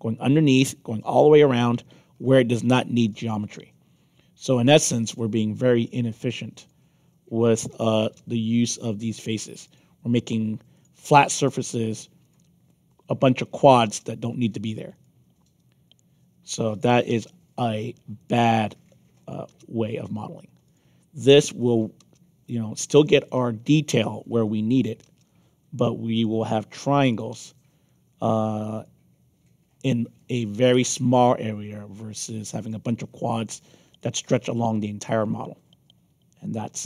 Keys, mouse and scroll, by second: 1.7 middle click, 2.5 middle click, 2.9 middle click, 6.5 click, 7.6 click, 8.0 Return, 9.6 click, 10.7 click, 11.1 Return, 12.2 click, 13.4 click, 13.8 Return, 14.9 click, 16.7 click, 17.1 Return, 18.1 click, 19.2 click, 19.5 Return, 20.6 click, 21.6 click, 22.0 Return, 23.1 click, 24.7 click, 25.0 Return, 26.1 click, 27.0 click, 27.3 Return, 28.7 click, 30.1 click, 30.5 Return, 32.5 click, 33.9 click, 34.2 Return, 34.9 click, 36.4 click, 36.6 Return.